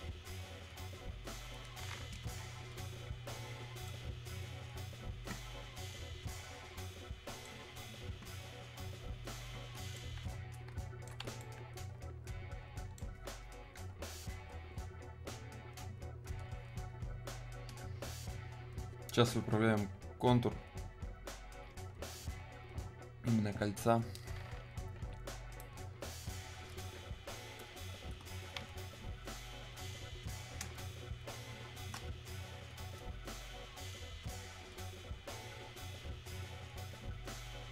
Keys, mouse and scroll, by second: 2.4-2.8 scroll, 3.9 right click, 4.0-10.0 right drag, 10.0-15.6 alt+right drag, 16.5 click, 25.1-25.7 scroll down 1, 28.0-30.7 drag, 30.7 space, 33.0-36.3 drag, 36.3-37.7 drag.